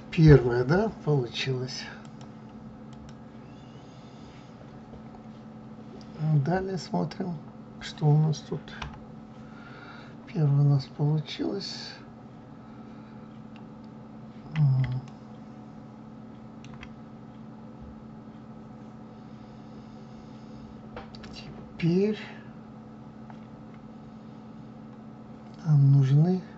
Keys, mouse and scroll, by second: 15.6-22.1 middle drag.